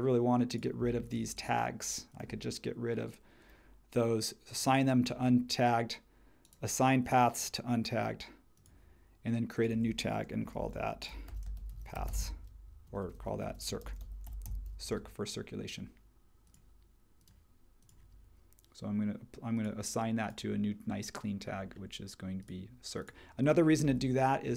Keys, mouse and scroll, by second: 10.3-14.9 typing.